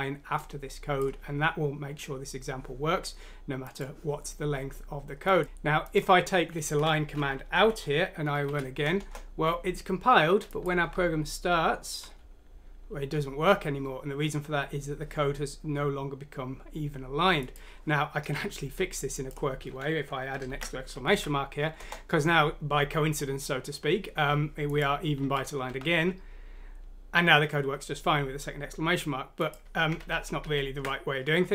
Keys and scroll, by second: 5.4 ctrl+z, 6.8 Home, 7.5 ;, 8.5 F6, 9.0 Return, 10.9-12.0 typing, 20.5 shift+1, 21.1 F6, 21.8 Return, 25.2-25.7 typing, 30.0 ctrl+z, 30.4 ctrl+z.